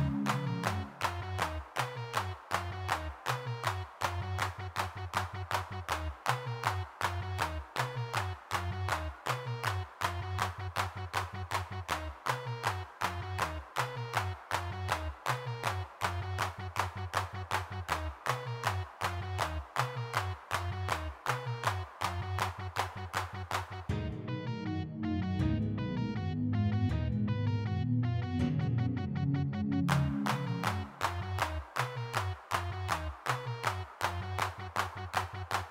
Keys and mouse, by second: 1.3 n, 3.1 f, 5.3 f, 11.6-14.2 middle drag, 14.2 f, 16.1-17.5 middle drag, 18.9 middle click, 22.0-23.5 drag, 29.3 f, 30.5 click, 31.6 click, 31.9 ctrl+z, 32.2 f, 33.0 click, 34.2 middle click.